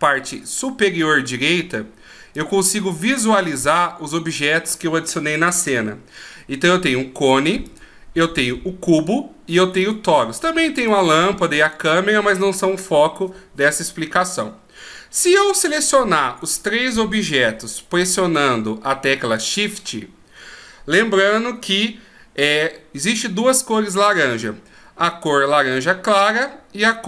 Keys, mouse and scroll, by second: 2.4 click, 7.6 click, 9.0 click, 10.9 click, 11.6 click, 15.5 click, 16.4 right click, 18.0 shift+right click.